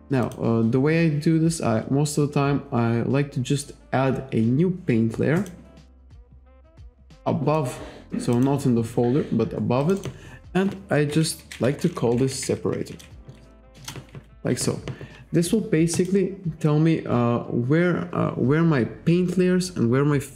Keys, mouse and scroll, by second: 0.3 click, 5.4 click, 6.5 click, 8.4 click, 9.8 click, 11.4 shift+s, 12.1 r, 12.8 0, 13.7 Return, 16.0 click.